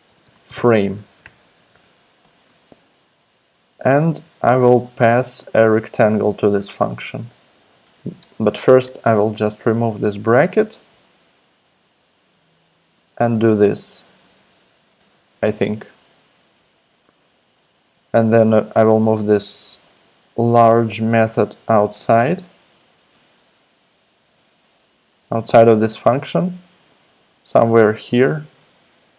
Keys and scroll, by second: 0.0-2.2 typing, 4.7 shift+super+Left, 5.9 shift+super+Left, 8.2 super+BackSpace, 8.8 BackSpace, 15.0 shift+], 22.2 super+x, 24.2 BackSpace, 28.2 Return.